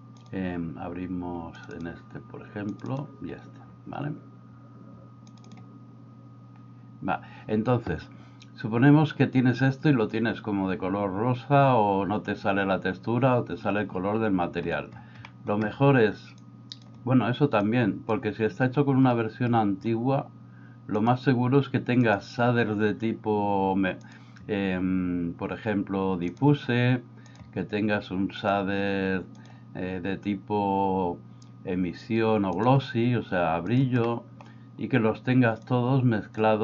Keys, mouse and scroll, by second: 0.2 click, 15.3 middle click, 16.4 click, 17.7 click, 21.1-22.7 drag, 24.1-27.4 drag, 28.4-33.7 drag, 34.2 middle click, 35.7-36.4 drag.